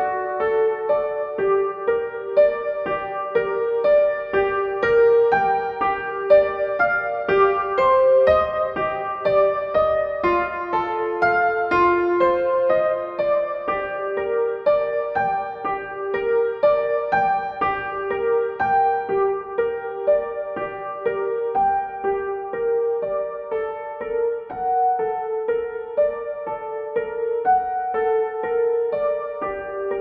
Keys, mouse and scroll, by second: 1.0-3.7 shift+drag, 5.8 right click, 6.6-17.9 drag, 20.8-25.0 drag, 27.7 click.